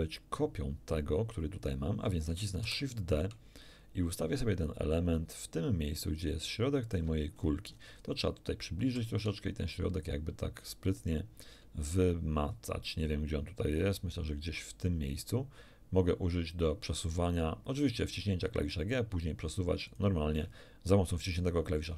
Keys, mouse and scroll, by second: 2.6 shift+d, 6.9 ctrl+click, 7.3-8.2 ctrl+scroll up 2, 8.9 g, 19.9 ctrl+shift+click.